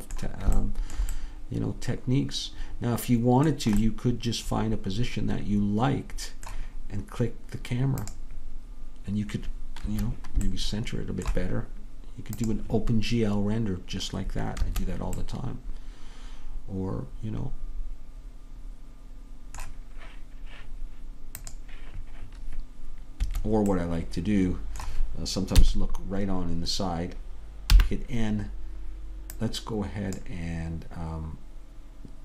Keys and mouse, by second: 9.9 Escape, 11.2-12.5 middle drag, 12.5 click, 14.7 Escape, 23.3 Escape, 25.7 KP_3, 27.8 n, 31.0 click.